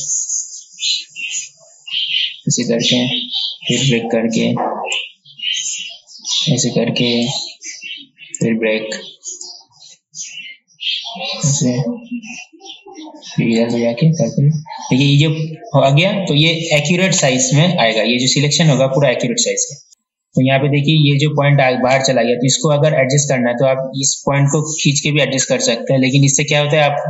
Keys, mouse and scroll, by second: 4.1-7.5 alt+drag, 8.5-11.9 alt+drag, 13.8-14.9 drag, 19.9 ctrl+z, 24.6-27.0 drag.